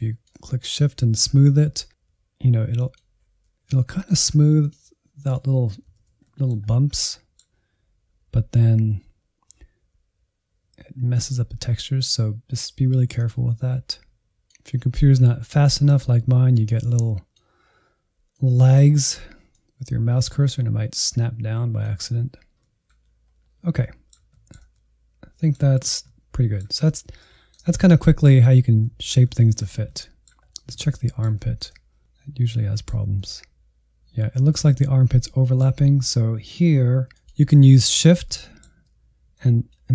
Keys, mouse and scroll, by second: 0.7 ctrl+z, 0.9 middle click, 1.2 scroll down 1, 1.5 middle click, 1.8-2.3 scroll down 1, 2.3 shift+click, 2.7 ctrl+z, 3.1 shift+click, 3.7 ctrl+z, 3.8 middle click, 3.9 scroll up 2, 4.1 middle click, 4.9 ctrl+z, 6.5 f, 7.3 click, 8.2 middle click, 9.1 shift+click, 9.4 middle click, 10.3-12.1 shift+drag, 12.1 f, 12.6 click, 12.9 shift+middle click, 13.5 ctrl+z, 13.7 middle click, 14.2 click, 14.7 middle click, 15.4-18.0 drag, 18.0 ctrl+z, 18.3 middle click, 18.5 scroll down 2, 18.6 middle click, 18.8 alt+z, 19.0-20.2 middle drag, 20.2 f, 20.8 click, 21.5 middle click, 22.1 click, 22.4-23.4 shift+middle drag, 23.4 click, 23.9 middle click, 24.3 scroll down 3, 24.5 middle click, 24.9 alt+z, 25.1 middle click, 25.3 alt+z, 25.5-26.6 shift+middle drag, 26.6 alt+z, 26.7 middle click, 27.2 scroll down 2, 27.4 shift+middle click, 28.3 scroll up 1, 28.4 middle click, 28.9 scroll down 1, 29.0 shift+middle click, 29.5 scroll up 1, 29.7 shift+middle click, 30.1 scroll up 1, 30.2 middle click, 30.6 middle click, 31.5 alt+z, 31.6 middle click, 32.3 alt+z, 32.4-33.8 middle drag, 33.8 scroll up 4, 34.2 scroll down 2, 34.4-36.5 middle drag, 36.5 f, 37.5-39.3 middle drag, 39.3-39.9 shift+drag.